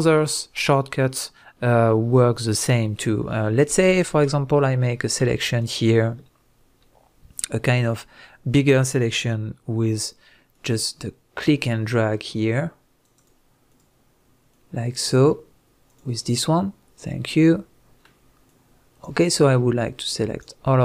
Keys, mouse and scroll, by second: 5.6 shift+drag, 7.5 click, 7.9-10.5 middle drag, 10.5 drag, 11.6 right click, 11.7 click, 12.2 click, 13.1 right click, 13.7 click, 15.0 click, 15.9 click, 17.5-18.5 middle drag, 18.5 click, 19.8 click, 20.7-20.8 middle drag.